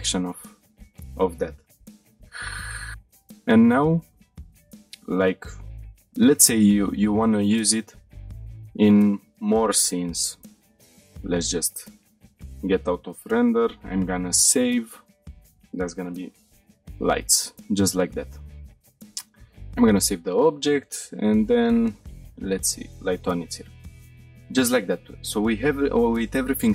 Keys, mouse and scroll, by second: 1.2 scroll down 1, 2.6-3.1 shift+middle drag, 2.9 scroll down 3, 3.1 shift+middle click, 3.5 scroll down 2, 3.9-4.4 shift+middle drag, 4.6-5.0 scroll down 2, 5.0 middle click, 5.5 shift+middle drag, 6.3 middle drag, 6.7-7.0 shift+middle drag, 7.1-7.8 scroll down 1, 7.8 middle click, 8.2 scroll down 2, 10.4-11.0 scroll up 1, 11.0 click, 13.9 click, 13.9 scroll up 1, 19.3-19.7 shift+middle drag, 21.2 click, 22.6-23.6 drag, 25.3 click.